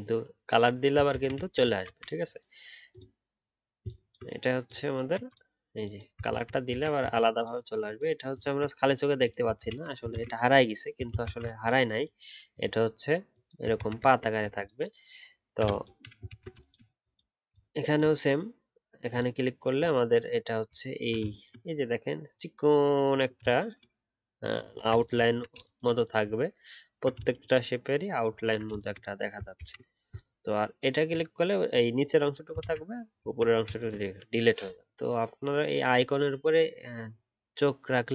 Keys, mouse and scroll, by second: 1.1 ctrl+z, 1.3 ctrl+z, 3.8 ctrl+click, 6.3 ctrl+z, 6.7 ctrl+z, 7.0 ctrl+z, 9.6 ctrl+z, 10.1 ctrl+z, 11.2 ctrl+shift+z, 13.7 ctrl+z, 14.0 ctrl+z, 16.2 ctrl+z, 17.5 alt+click, 20.8 alt+scroll up 1, 24.7 ctrl+z, 25.2-26.3 alt+scroll down 3, 26.3 alt+scroll up 1, 28.4-28.7 alt+scroll down 1, 32.6 ctrl+z, 33.2-33.7 alt+scroll down 1.